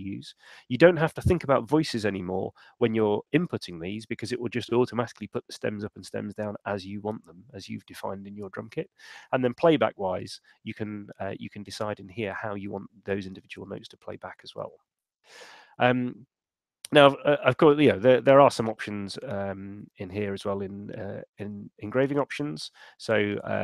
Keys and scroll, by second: 17.9 shift+super+e.